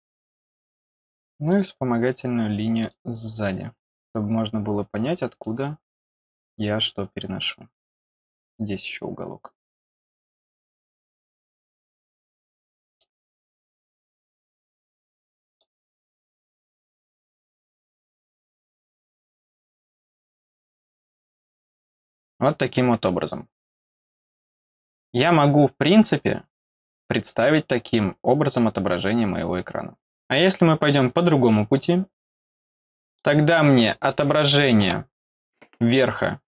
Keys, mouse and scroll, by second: 1.5 click, 2.8 click, 4.2 scroll down 1, 5.4 middle click, 7.7 middle click, 9.4-10.1 scroll up 3, 11.4 click, 11.8-12.1 scroll down 4, 12.4 middle click, 13.3 scroll down 2, 13.4 middle click, 15.4 click, 17.1 scroll down 1, 18.1 scroll down 1, 19.0 middle click, 20.4 scroll down 1, 20.9 middle click, 31.8 scroll up 2, 33.0 click.